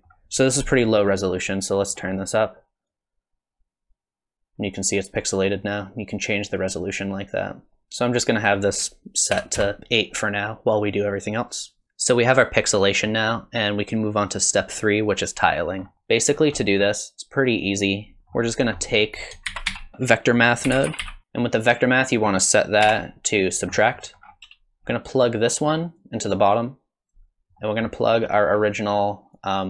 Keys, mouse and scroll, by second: 0.5 scroll up 4, 0.9 middle click, 2.0 middle click, 2.9 click, 8.4 click, 11.8 middle click, 13.0 middle click, 15.8 scroll up 3, 15.9 middle click, 16.4 scroll down 4, 16.6 middle click, 17.8 click, 18.2 middle click, 18.2 scroll up 4, 18.2 g, 18.5 click, 18.8 middle click, 19.2 click, 19.5 shift+a, 21.2 click, 22.0 click, 23.9 middle click, 24.2-24.9 scroll down 3, 24.9-25.8 scroll up 3, 26.0 click, 27.6 middle click, 28.1 middle click, 28.5-29.0 scroll down 1, 29.3 click.